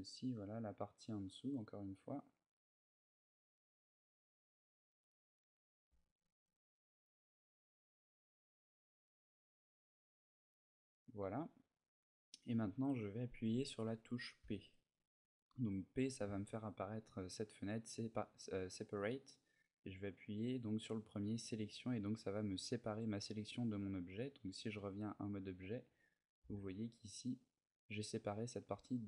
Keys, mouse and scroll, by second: 4.6 right click, 4.8 middle click, 5.6 c, 10.4 right click, 10.9 middle click, 23.2 middle click, 24.6 Tab, 25.3 right click, 26.1 g, 28.8 right click.